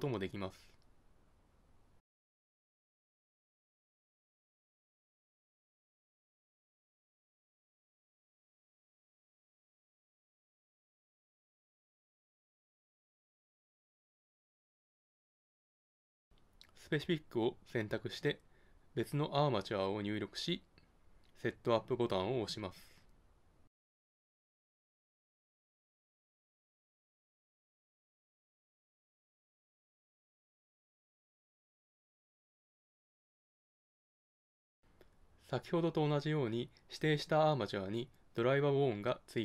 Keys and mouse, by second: 1.8 Tab, 3.1 shift+a, 5.2 Tab, 6.3 g, 7.9 click, 8.3 g, 10.3 Tab, 12.5 Tab, 16.4-18.2 drag, 18.3 middle click, 19.0-22.6 drag, 24.2-26.0 drag, 28.5-30.3 drag, 32.0 click, 33.8-35.1 middle drag, 34.4 Tab, 37.4 ctrl+Tab.